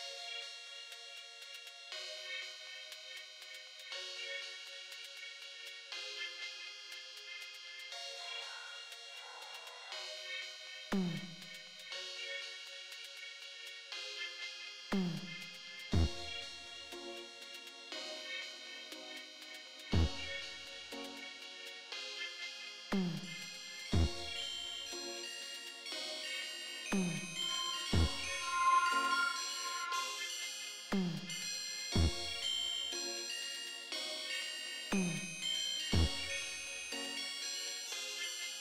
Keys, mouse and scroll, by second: 2.5-4.3 drag, 6.1 g, 7.8 right click, 8.0 click, 13.0 click, 14.4-16.3 drag, 17.5-18.9 drag, 29.8-32.8 drag, 34.4-36.9 drag, 38.4-38.6 drag.